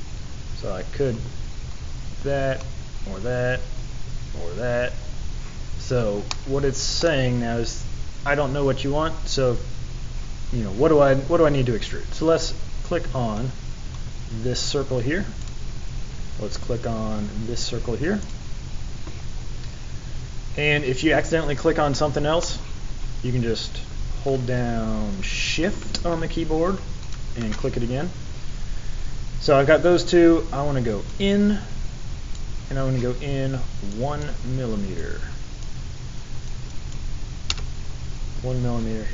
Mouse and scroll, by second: 0.7 scroll up 2, 2.4 scroll down 2, 2.5 scroll up 2, 6.3 middle click, 13.2-13.9 scroll down 3, 15.4 click, 18.2 click, 22.4 click, 27.0 click, 31.1-32.3 drag, 33.9-34.2 drag, 35.0 click, 36.4 click.